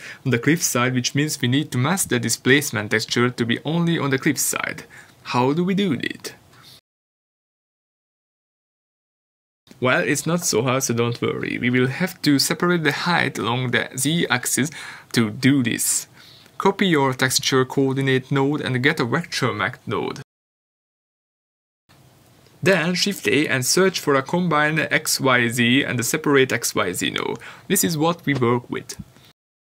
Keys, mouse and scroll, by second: 2.9 click, 14.4 shift+d, 16.5 click, 29.4 shift+a.